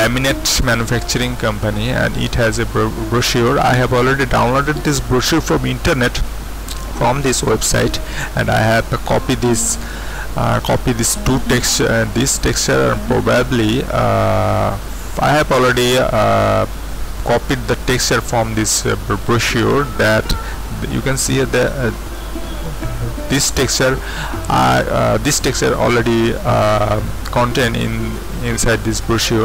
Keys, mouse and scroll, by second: 0.8-2.2 scroll down 2, 1.1-2.2 middle drag, 2.3 middle click, 2.3-3.8 scroll down 2, 2.6-3.8 middle drag, 3.8-5.4 drag, 8.6 middle click, 8.6-10.9 scroll down 2, 12.1-15.3 scroll down 2, 15.3-17.6 scroll up 2, 17.6-20.5 scroll up 1, 20.6-21.6 scroll up 2, 21.3-22.5 drag, 27.6-28.5 scroll down 2, 29.2-29.4 scroll up 2.